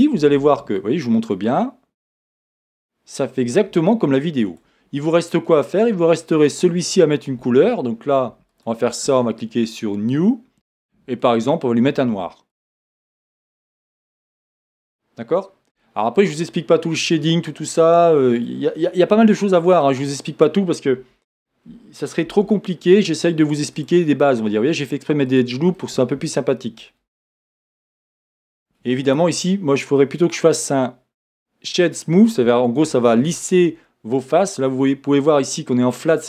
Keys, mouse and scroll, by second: 1.3-6.5 middle drag, 5.0 click, 6.5 click, 9.9 click, 15.8-18.0 middle drag, 16.6-17.1 scroll up 2, 19.8 Tab, 19.8 middle click, 20.5-21.0 scroll up 1, 21.0 a, 22.3 ctrl+r, 25.8 middle click, 27.4 Tab, 27.9 middle click.